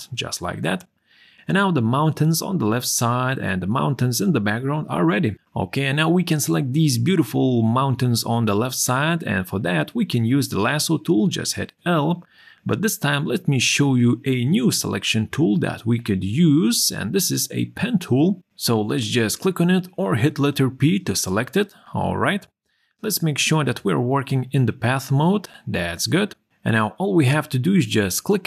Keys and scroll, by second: 9.2 l, 20.3 p.